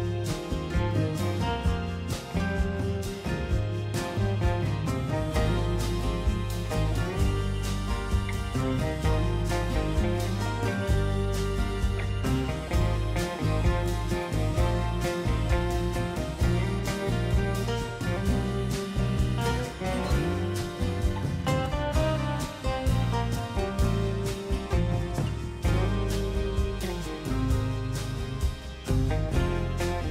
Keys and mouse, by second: 1.5 click, 3.6 middle click, 6.7 alt+click, 8.5 middle click, 10.0 KP_3, 10.3 KP_Decimal, 11.2-12.7 middle drag, 13.4 1, 14.7 k, 18.8-22.6 middle drag, 23.3 middle click, 24.3 Tab, 24.6 middle click, 26.2 click, 26.7 middle click, 28.9-30.1 drag.